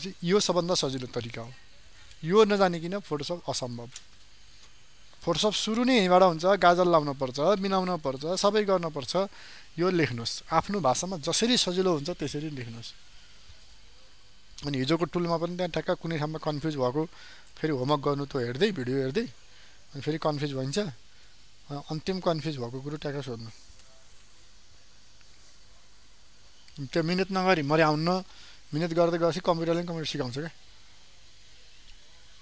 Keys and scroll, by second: 0.9 ctrl+space, 2.7 ctrl+alt+space, 5.6 ctrl+space.